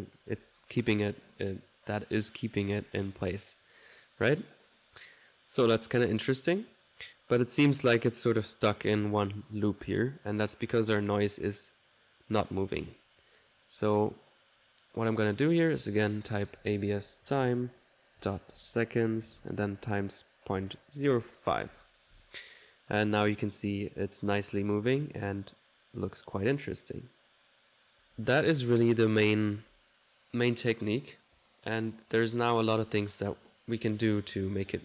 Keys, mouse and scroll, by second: 4.9 click, 6.6 click, 10.7-22.9 drag, 26.5 click, 28.2 click, 28.6 ctrl+s, 34.3 middle click.